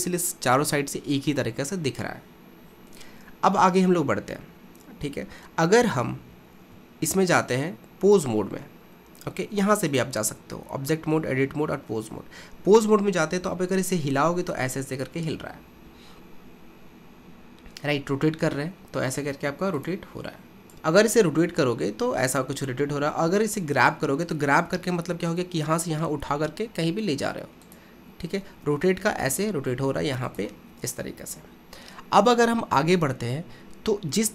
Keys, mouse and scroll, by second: 3.2-3.8 scroll up 2, 3.8-6.3 scroll down 1, 6.6 ctrl+Tab, 9.9-13.0 drag, 13.5 r, 23.3 g, 29.4 r.